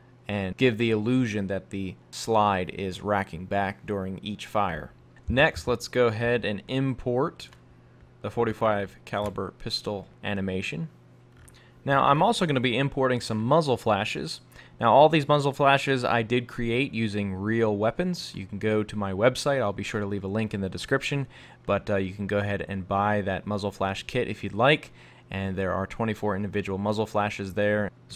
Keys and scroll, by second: 5.2 super+Tab.